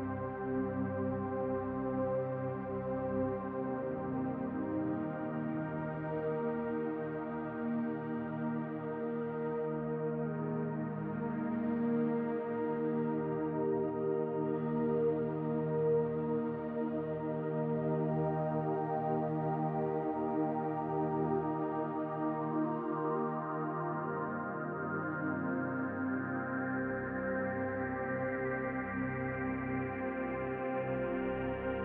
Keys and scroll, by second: 3.6 ctrl+z, 5.6 ctrl+z.